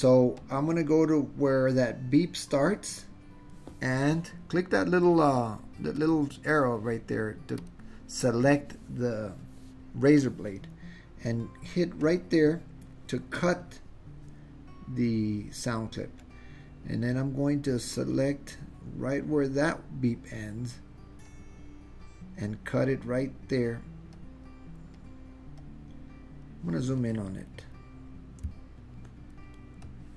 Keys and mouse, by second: 0.5 click, 6.0 click, 7.7 click, 12.1 click, 16.3-20.4 drag, 21.4 click, 24.3 click, 25.1 click, 25.7 click, 29.7-30.1 ctrl+middle drag.